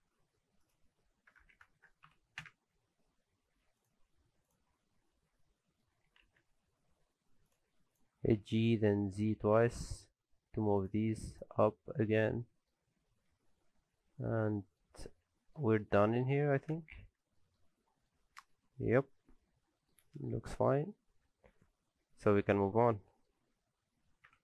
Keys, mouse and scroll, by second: 1.7 KP_0, 3.3 scroll down 3, 3.6 alt+a, 3.8 click, 4.1 scroll down 1, 4.4 click, 4.7-5.7 scroll up 6, 5.4 middle click, 5.9 g, 7.9 click, 8.2 scroll up 1, 8.6 click, 8.9 middle click, 9.3 g, 11.0 alt+a, 11.3 click, 11.5-12.9 scroll down 3, 11.7 middle click, 13.1 alt+a, 13.6-14.3 scroll down 6, 14.0 middle click, 15.1-15.5 scroll down 2, 15.4 middle click, 15.6 shift+middle click, 16.0-16.6 scroll down 2, 16.2 middle click, 16.7 ctrl+space, 17.4 shift+middle click, 17.6-18.0 scroll up 2, 17.9 middle click, 18.2 shift+middle click, 18.7 scroll down 1, 18.8 middle click, 21.5 ctrl+space, 22.2 scroll down 1, 22.3 shift+middle click, 22.7 scroll up 1, 23.0 shift+middle click.